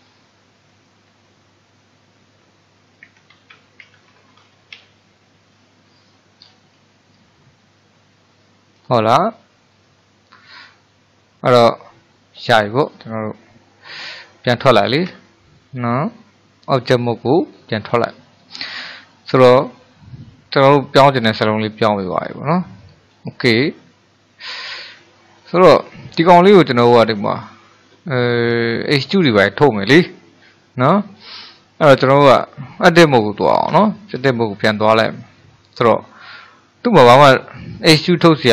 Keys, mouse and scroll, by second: 0.7 space, 1.0 a, 3.3-4.8 typing, 6.5-7.6 scroll down 3, 8.3-13.6 shift+middle drag, 15.1 Tab, 16.3-17.5 middle drag, 17.5-18.2 scroll up 1, 18.2-22.4 shift+middle drag, 22.8-23.3 scroll up 2, 23.3-24.7 shift+middle drag, 24.7-25.2 scroll down 1, 25.2-33.7 shift+middle drag, 33.7 Tab, 34.7-37.9 middle drag.